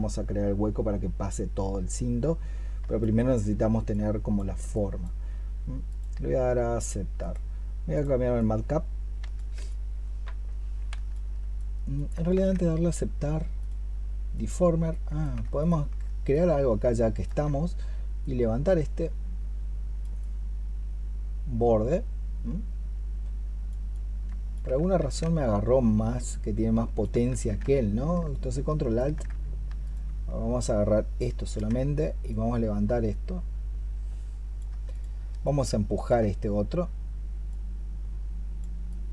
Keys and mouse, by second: 8.2 double click, 10.7 double click, 12.2 ctrl+z, 15.4 ctrl+click, 16.2 ctrl+alt+click, 24.8 ctrl+z, 27.2 ctrl+z, 28.1 ctrl+alt+click, 29.7 ctrl+click, 34.8 ctrl+click.